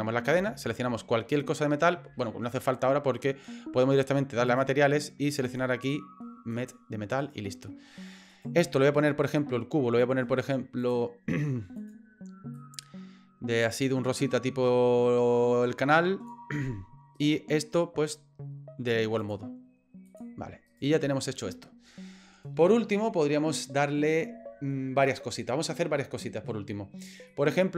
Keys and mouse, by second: 4.5 click, 5.4-6.8 drag, 7.3 right click, 8.3 right click, 10.9 click, 11.8 click, 17.2 right click, 19.2-20.2 drag, 20.7 right click, 27.4 middle click.